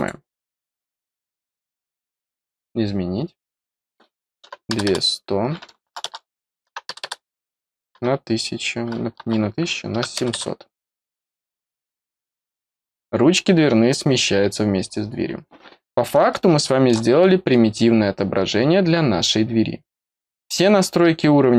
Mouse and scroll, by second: 0.5 click, 1.8 click, 3.5 click, 7.2 click, 11.1 click, 12.7 click, 13.4 scroll up 2, 14.9-15.6 scroll down 4, 16.2 middle click, 17.1-19.8 middle drag, 19.8 click, 20.3 click.